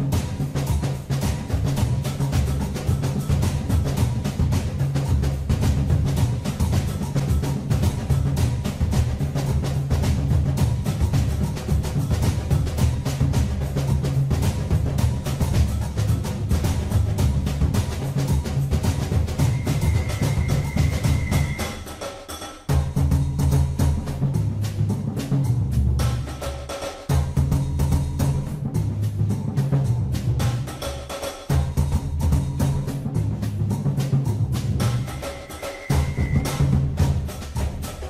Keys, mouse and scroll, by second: 1.2 click, 3.4 3, 4.9 click, 7.1 KP_3, 9.1 e, 15.3 click, 19.8 click, 22.6 KP_3, 28.5 click, 32.4 shift+click, 34.7 ctrl+b.